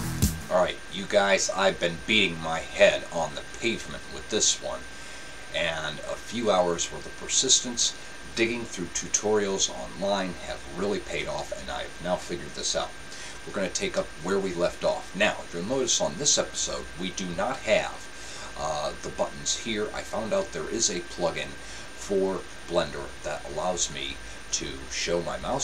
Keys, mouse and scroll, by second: 23.9-25.6 drag.